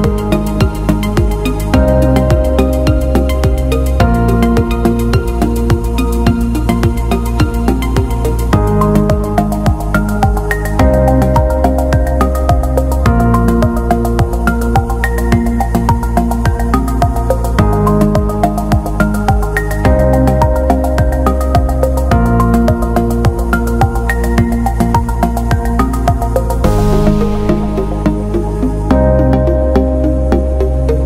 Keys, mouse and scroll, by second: 2.7 scroll up 1, 4.4 click, 5.7 Down, 6.6-7.1 scroll down 1, 8.3 click, 8.7-10.7 alt+scroll up 1, 10.7 click, 13.2 click, 13.5-13.9 alt+scroll down 1, 13.9-14.2 alt+scroll up 1, 15.3 click, 20.9-21.3 scroll down 1, 22.6 click, 24.3 a, 25.3 click, 25.9-27.0 typing, 26.7 click, 28.5-29.6 scroll down 1, 30.3 click.